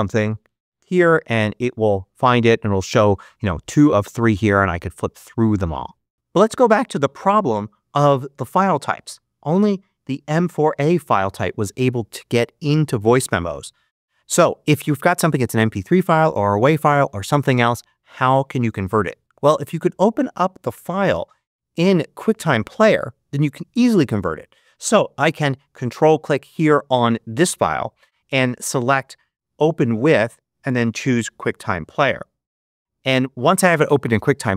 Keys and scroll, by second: 0.0-0.7 typing, 25.7 Up.